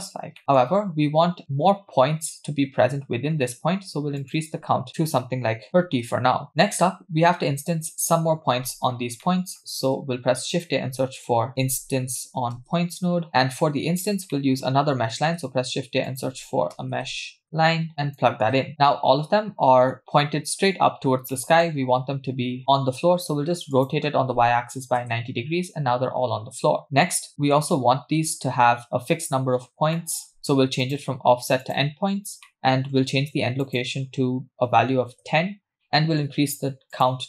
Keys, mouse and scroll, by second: 0.4 middle click, 4.2-6.1 drag, 5.7 BackSpace, 8.9-9.2 scroll down 2, 9.2 middle click, 9.7 shift+a, 13.5 click, 14.4 middle click, 14.7-15.2 scroll down 2, 15.2 shift+a, 17.9 click, 18.7 scroll down 3, 18.9-19.9 middle drag, 21.3 middle click, 21.7-23.0 scroll up 1, 23.0-23.7 scroll up 2, 23.7 scroll up 1, 23.7-25.0 drag, 26.8 middle click, 29.6-30.0 scroll up 2, 30.0 middle click, 30.8-31.8 drag, 32.5 middle click, 33.6-35.2 drag, 35.8 middle click, 36.9-37.2 drag.